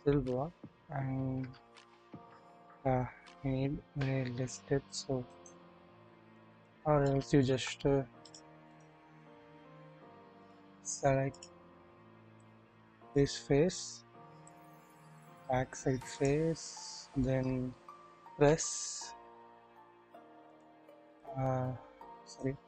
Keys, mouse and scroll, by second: 0.3 typing, 1.4 typing, 5.2 right click, 6.3 click, 7.0-7.5 shift+middle drag, 8.2-8.8 drag, 10.4 click, 12.4 click, 14.5 click, 16.1 shift+click, 16.6 shift+middle click, 18.4 s, 21.2-22.4 drag.